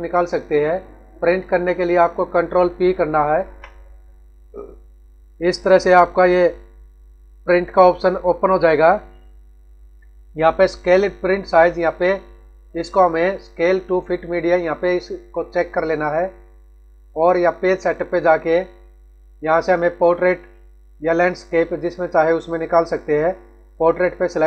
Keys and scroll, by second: 3.2 ctrl+p.